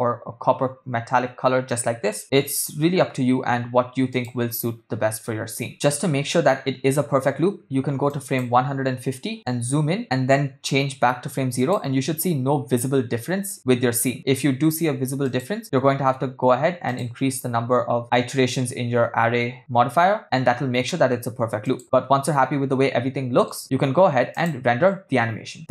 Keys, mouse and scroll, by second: 2.4 space, 2.6 space, 4.1 click, 5.9 space, 6.1 space, 8.3 click, 9.3 ctrl+middle click, 10.1 click, 11.8 click, 15.6 click, 16.9 click, 18.0 click, 22.0-23.6 ctrl+middle drag, 22.1 click, 24.3-25.7 drag.